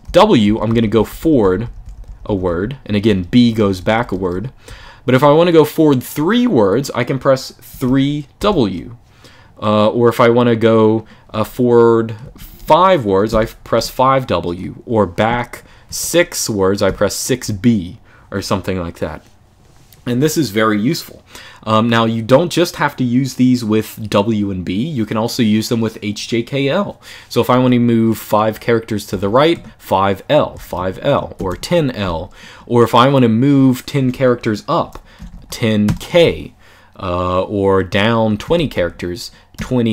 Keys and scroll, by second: 0.0-4.9 typing, 7.4 3, 8.1 w, 12.0-13.5 typing, 15.6-17.1 typing, 28.8-32.0 typing, 34.7-35.6 typing, 38.2-39.3 typing.